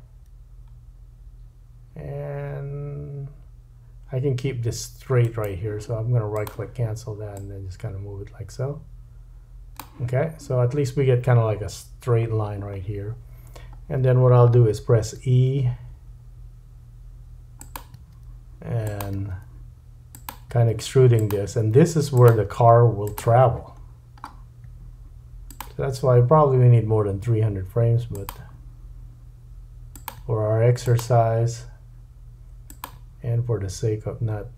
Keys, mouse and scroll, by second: 5.2-6.3 middle drag, 6.3-17.7 drag, 13.4-15.2 scroll down 1, 15.2 e, 17.7 middle click, 18.0 e, 19.1 e, 20.5 e, 21.5 e, 22.5 e, 23.8-24.6 scroll down 4, 23.9-34.5 middle drag, 24.6 e, 27.2 e, 28.4 e, 30.2 e, 31.1 e, 33.0 e.